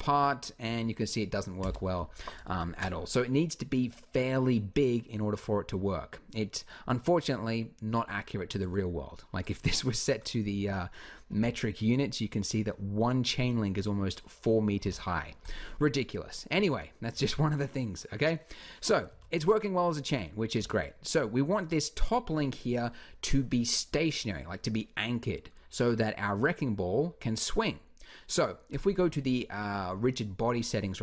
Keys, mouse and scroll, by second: 1.5 Escape, 2.3 ctrl+z, 5.1 a, 11.1 n, 11.4 click, 14.6 n, 18.9 alt+a, 20.4 Escape, 28.5 click.